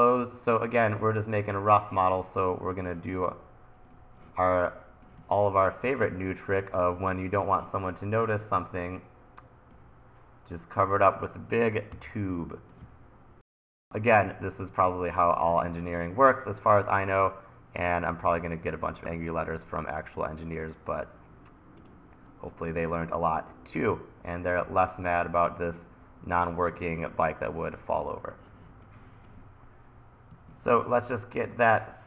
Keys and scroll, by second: 3.0 super+z, 5.2 1, 12.0 t, 12.9 e, 19.1 e, 24.7 e, 30.3 1.